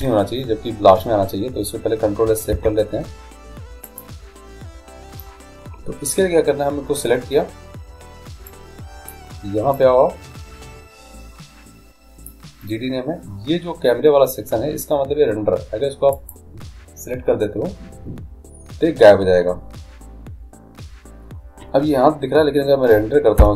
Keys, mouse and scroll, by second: 2.8 ctrl+s, 8.7-11.9 drag, 16.4-18.0 drag.